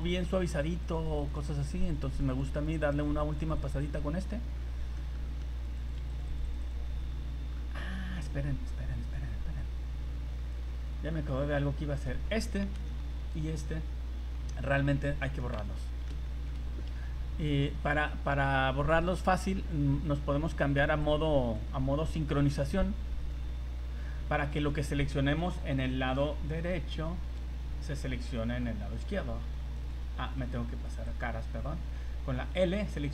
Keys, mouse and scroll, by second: 0.0 click, 0.2 middle click, 0.8 click, 1.3 click, 1.4 click, 1.7 click, 1.9 click, 2.1 click, 2.3 click, 2.5 click, 2.8 click, 2.9 click, 3.2 click, 3.4 click, 3.5 click, 3.7 click, 3.9 scroll down 3, 4.2 middle click, 4.7 scroll up 1, 5.0 shift+middle click, 5.2 middle click, 5.6 click, 6.0 click, 6.2 click, 6.3 click, 6.4 click, 6.6 click, 6.8-8.0 scroll down 6, 7.1 Tab, 9.0 click, 9.6 click, 11.3 middle click, 12.3 click, 12.7 l, 13.2 l, 14.9 l, 15.4 middle click, 16.1 middle click, 16.3 shift+middle click, 16.4 shift+middle click, 16.5-16.8 scroll down 3, 18.4 click, 19.1 scroll down 2, 21.0 click, 23.2 click, 23.9 scroll up 3, 24.5 click, 25.4 right click, 27.3 shift+l, 29.0 l, 29.8 right click, 31.1 click, 32.3 l.